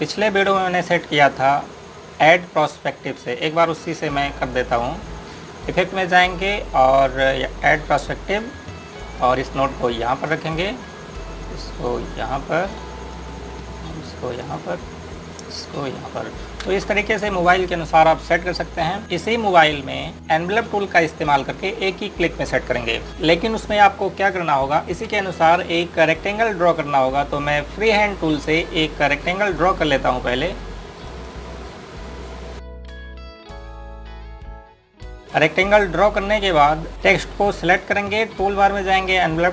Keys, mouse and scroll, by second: 0.7 right click, 1.3 scroll up 1, 2.2-4.1 scroll down 1, 4.1 scroll up 1, 17.5 space, 25.0 click, 25.8 Delete, 29.0 click, 34.4 scroll up 1, 34.7 click, 35.3 space, 35.5-36.0 scroll down 1, 36.0 click, 36.8 scroll up 1, 36.9 click.